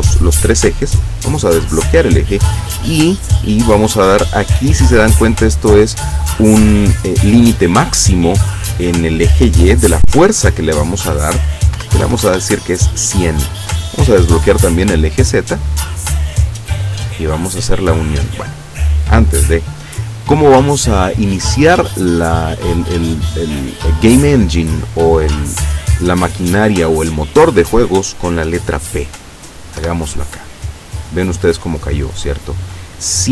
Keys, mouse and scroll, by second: 1.1 click, 10.5 click, 11.8 KP_1, 12.0 KP_0, 12.4 KP_Enter, 14.8 click, 15.5 click, 29.9 p, 32.3 click.